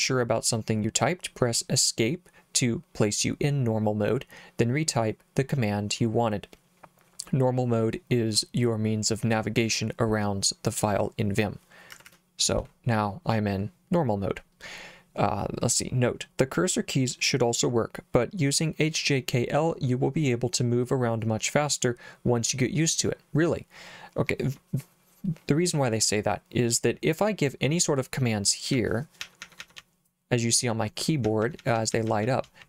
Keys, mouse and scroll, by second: 11.9 Escape, 28.5-32.6 typing.